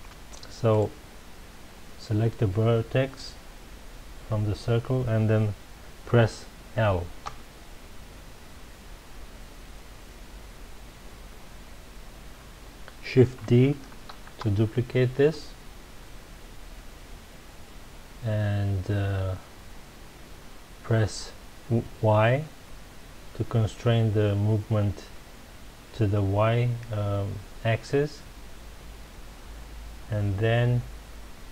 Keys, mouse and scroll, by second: 0.7 click, 7.2 l, 14.1 shift+d, 17.6-21.6 middle drag, 22.9 middle click.